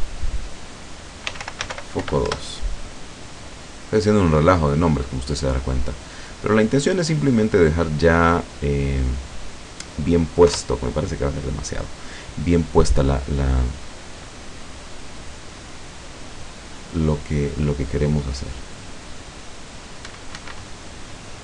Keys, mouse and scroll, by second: 1.3-2.0 typing, 2.3 Return, 6.0 right click, 7.1 click, 8.5 scroll down 1, 10.5 F12, 20.2 Escape.